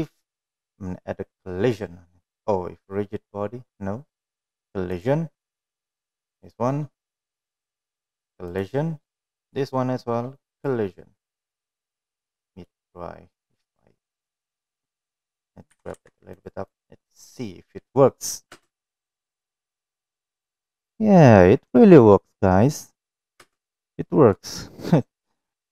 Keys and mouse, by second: 5.1 click, 6.6 click, 7.5 click, 9.6 click, 10.8 click, 11.5 click, 11.9-12.4 middle drag, 12.8-13.8 middle drag, 14.2 middle click, 14.9 click, 15.6 click, 15.9 g, 16.9 click, 18.7 space, 23.8 space, 24.6-25.6 middle drag.